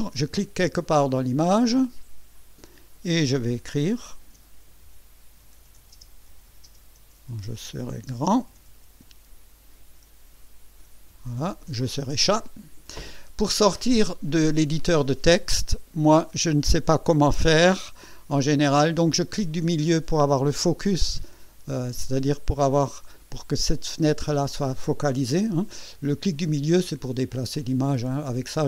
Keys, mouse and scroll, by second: 2.3 click, 4.2-10.0 typing, 11.1 KP_Decimal, 22.6 click, 23.3 click, 24.2 click, 26.4-28.3 drag, 28.4-28.6 drag.